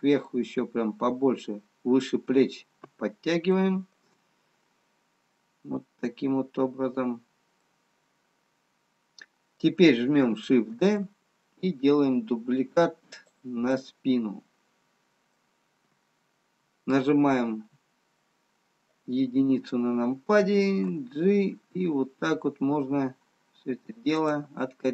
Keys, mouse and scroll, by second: 1.0 middle click, 6.0 click, 8.2 middle click, 12.0 shift+d, 15.1 middle click, 17.6 KP_1.